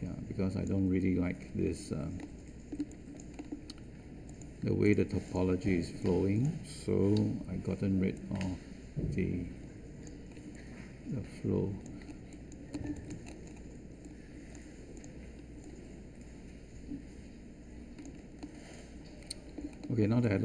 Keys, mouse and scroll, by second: 7.1 w.